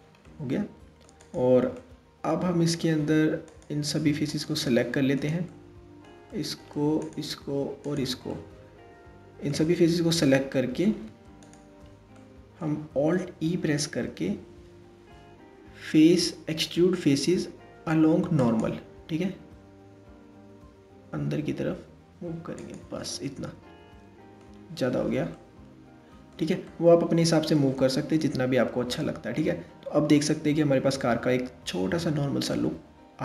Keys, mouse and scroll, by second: 1.1 click, 1.4-2.5 middle drag, 2.5 scroll up 1, 3.1 click, 3.9 shift+click, 4.4-6.6 middle drag, 6.6 shift+click, 7.5 shift+click, 7.9-9.5 middle drag, 9.5-10.1 scroll down 1, 10.1-11.0 middle drag, 11.0 shift+click, 11.6-13.3 middle drag, 13.3 alt+e, 22.6-28.0 middle drag, 28.0 Tab, 28.6-31.6 middle drag.